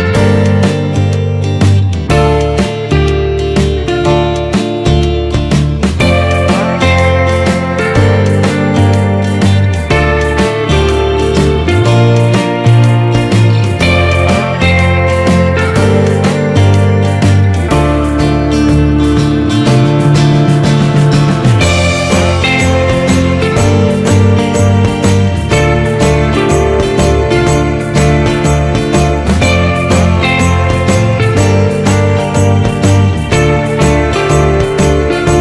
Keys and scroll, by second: 5.1 ctrl+=, 6.4 ctrl+space, 16.0 ctrl+-.